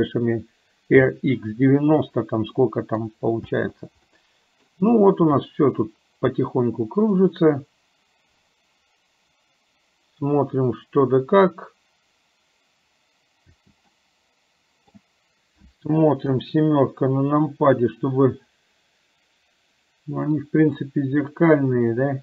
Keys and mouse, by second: 2.7 middle click, 3.5 space, 4.2 middle click, 5.5-7.2 middle drag, 13.5 space, 14.0-15.0 middle drag, 16.3 KP_7, 21.2-22.2 drag.